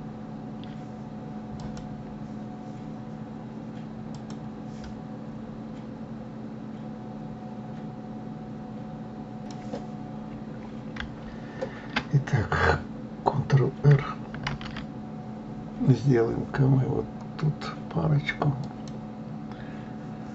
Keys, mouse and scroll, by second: 1.6 click, 14.9 ctrl+r.